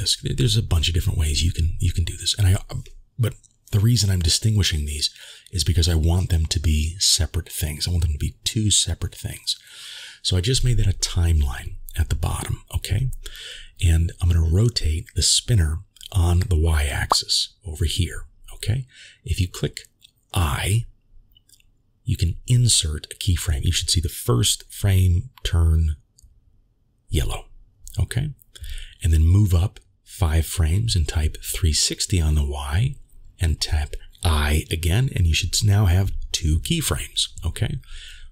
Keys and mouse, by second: 1.2-2.3 drag, 4.3 click, 7.6 click, 21.2 i, 23.1 click, 26.6-30.1 drag, 31.7 i, 35.1 middle click, 36.5 middle click.